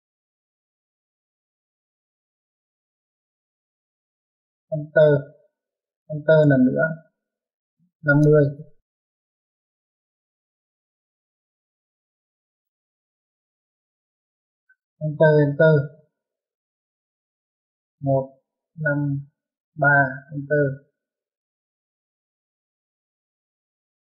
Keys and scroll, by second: 5.1 space, 6.5 space, 8.6-9.7 typing, 15.3-15.7 typing, 18.1 typing, 19.9-20.6 typing.